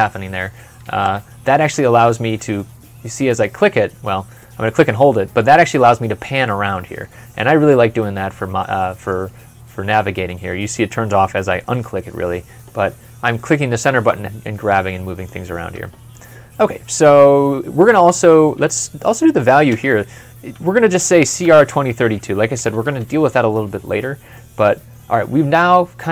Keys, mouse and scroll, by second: 0.7 ctrl+F12, 2.4 middle click, 19.5 middle click, 19.6 v, 20.8-22.9 typing, 24.2 middle click.